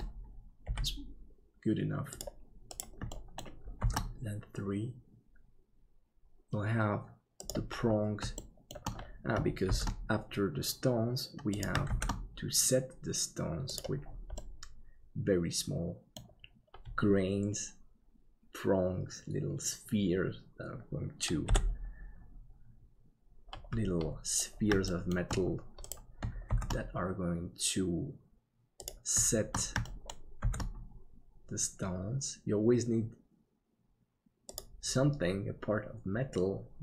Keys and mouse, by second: 0.6 g, 3.1 shift+middle click, 3.8 shift+d, 8.4 shift+middle click, 9.7 shift+d, 14.4-16.2 middle drag, 21.4 KP_7, 24.9 shift+middle click, 26.5 shift+d, 29.8 shift+middle click, 30.4 shift+d.